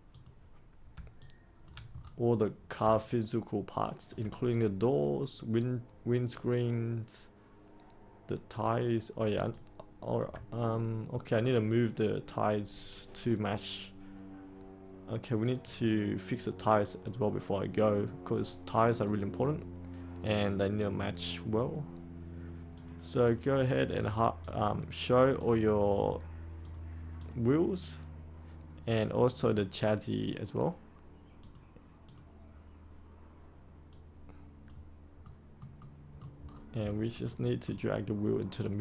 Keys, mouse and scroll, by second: 1.1 alt+click, 1.9-2.8 scroll up 1, 3.0 alt+click, 8.5 click, 9.4 alt+click, 10.6 middle click, 11.2 scroll up 1, 11.3-11.6 scroll down 1, 15.4-35.1 drag, 35.1 middle click, 36.3-37.2 scroll down 1, 37.2-38.5 middle drag.